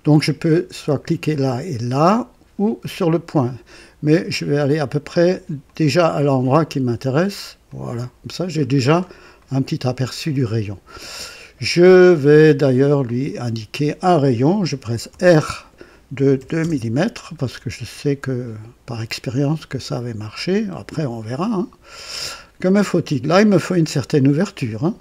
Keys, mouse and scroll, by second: 5.6 click, 7.6 click, 8.6-9.0 scroll down 2, 9.3 right click, 10.4 right click, 13.0 click, 15.1 r, 16.3 KP_2, 16.5 Return, 18.9-22.3 drag, 24.9 click.